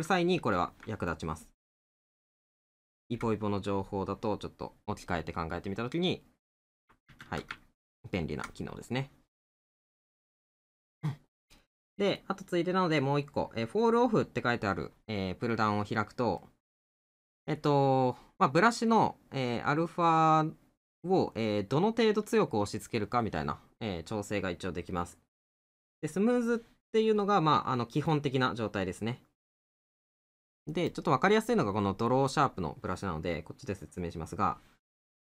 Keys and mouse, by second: 7.6 middle click, 11.6 middle click, 15.5 middle click.